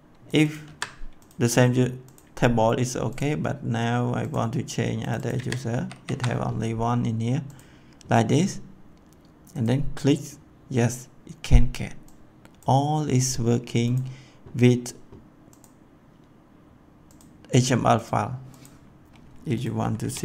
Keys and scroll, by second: 0.6 ctrl+c, 1.3 ctrl+c, 5.3 ctrl+v, 5.7 ctrl+s, 19.7-20.2 typing.